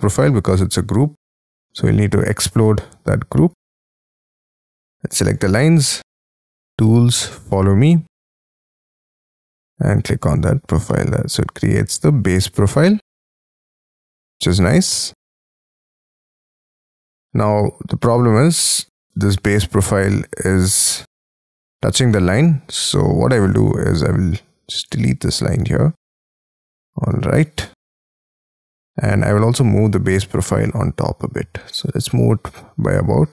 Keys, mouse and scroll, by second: 0.3-0.6 scroll up 5, 0.6-1.4 scroll down 6, 1.4 right click, 4.1-5.2 scroll down 40, 7.5-10.2 scroll up 36, 10.2-10.8 scroll down 12, 10.8 middle click, 12.6 space, 12.7-15.6 scroll up 8, 15.6-16.2 scroll up 8, 16.2 middle click, 17.5-17.9 ctrl+scroll down 7, 18.2-20.1 scroll up 17, 20.1-20.9 scroll up 4, 22.1 space, 22.5 scroll up 5, 22.7 middle click, 22.9-23.4 scroll down 6, 23.5 scroll up 1, 23.6 l, 24.9 e, 25.9 e, 26.7 double click, 27.1 space, 27.2-27.8 scroll down 8, 27.8-28.3 scroll up 12, 28.6-30.3 scroll down 2, 30.3 m, 31.7 Up.